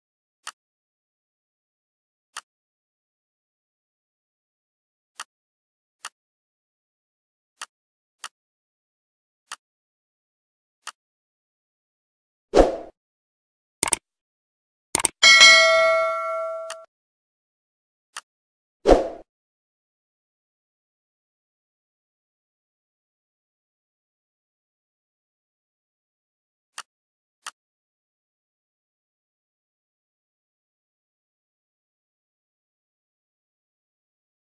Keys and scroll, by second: 28.7 Right.